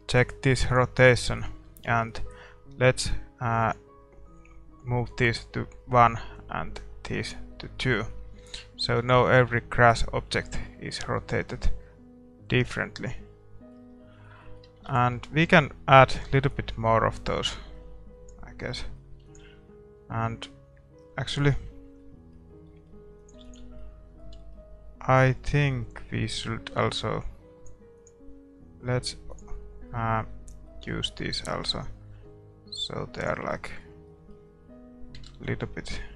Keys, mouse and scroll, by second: 0.1-2.4 scroll up 1, 2.4-2.9 scroll up 1, 2.9 scroll down 1, 7.9 middle click, 9.3 ctrl+s, 9.3-10.8 drag, 9.5-11.3 middle drag, 11.4 middle click, 11.7 middle click, 13.7 scroll up 1, 13.9-17.5 middle drag, 16.6 ctrl+s, 16.6-18.4 drag, 18.7-29.4 middle drag, 22.0 ctrl+s, 23.2-29.9 drag, 23.8 ctrl+s, 29.9-32.4 middle drag, 31.4-33.0 drag, 33.5-36.1 middle drag, 35.4 shift+z.